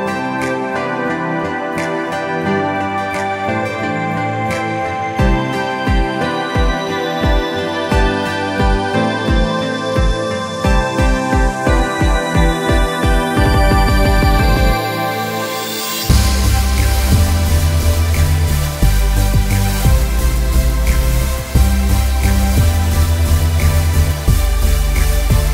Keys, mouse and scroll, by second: 0.5 click, 1.0 scroll up 1, 1.4 click, 1.8 alt+scroll down 2, 2.1 click, 3.6 scroll down 1, 3.9 click, 4.2 click, 4.4 scroll up 1, 4.7 click, 4.9 scroll down 1, 5.4 click, 5.5 scroll up 1, 5.7 click, 5.9-6.8 scroll down 3, 6.1 click, 6.5 click, 6.8 click, 7.2 scroll up 1, 7.4 click, 8.2 alt+scroll down 1, 9.0 click, 9.1 scroll up 1, 9.3 alt+scroll down 1, 9.5 click, 10.5 shift+click, 11.8 scroll up 1, 12.0 shift+click, 12.4 shift+click, 13.1 shift+click, 13.2 scroll up 1, 13.4 shift+click, 13.9 shift+scroll up 1, 14.4 alt+scroll down 2, 14.8 click, 15.3 click, 15.6 scroll down 1, 15.9 click, 16.0 alt+scroll up 1, 16.1 scroll down 1, 16.4 click, 17.2 click, 18.3 scroll down 1, 18.5 click, 19.3 scroll down 1, 19.5 click, 20.0 scroll down 1, 20.2 space, 20.3 scroll up 2, 20.6 click, 21.2 scroll up 1, 21.5 click, 22.1 click, 23.6-23.9 scroll down 1, 23.9 click, 24.0-24.7 alt+scroll up 3, 24.2 space, 24.8 click, 25.0 shift+click, 25.3 alt+scroll up 2.